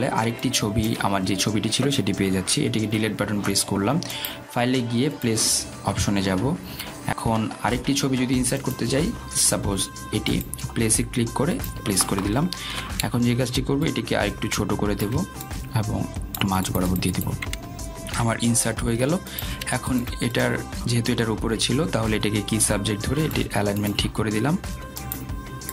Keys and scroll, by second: 5.1 Delete.